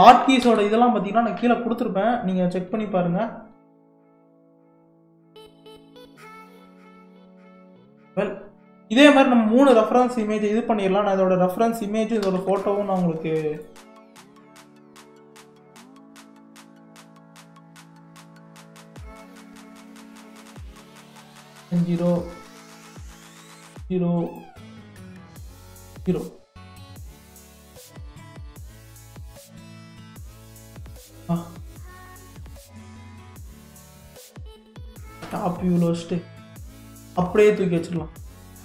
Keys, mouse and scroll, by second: 7.3-8.3 middle drag, 8.3-8.7 scroll down 1, 8.7-9.5 middle drag, 9.5-10.9 scroll down 1, 10.9-11.7 scroll up 1, 11.7-12.2 scroll up 1, 12.2 shift+a, 17.9-19.5 middle drag, 19.5-27.5 drag, 28.9-31.9 drag, 31.9 g, 35.2 KP_7, 36.2-36.8 scroll up 1, 36.8-38.4 shift+middle drag, 38.4 g.